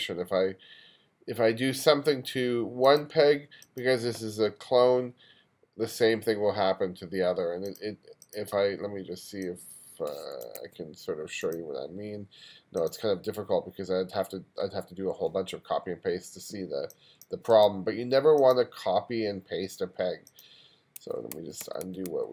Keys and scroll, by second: 10.6 super+z, 21.3 super+z.